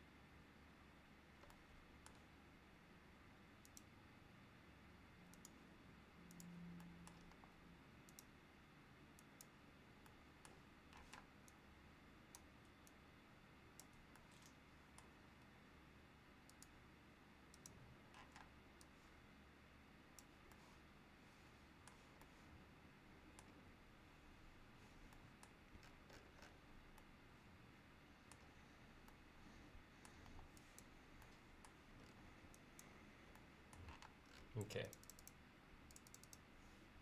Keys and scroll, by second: 7.4 e, 11.1 p, 15.5 l, 18.4 p, 30.3 e, 34.1 space.